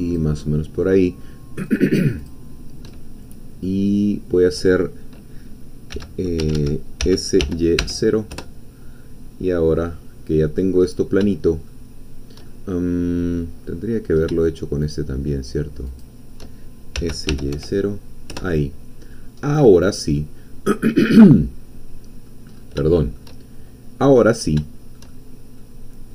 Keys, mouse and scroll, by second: 0.0 shift+click, 1.8 shift+click, 3.0 shift+middle click, 3.7-4.7 drag, 5.9 x, 6.5 Escape, 7.0 s, 7.4 y, 7.8 0, 8.3 Return, 9.4-9.8 scroll down 1, 9.8 middle click, 10.8-11.3 scroll up 1, 11.3 shift+middle click, 12.4-14.8 shift+middle drag, 14.8 shift+click, 16.0 shift+click, 16.9 s, 17.4 y, 17.6 0, 18.3 Return, 19.4-19.7 scroll down 2, 19.9-22.4 middle drag, 22.6 scroll up 2, 22.9 shift+middle click, 24.6 shift+middle click, 24.7 shift+scroll up 1, 25.1 shift+middle click, 25.9 scroll up 1.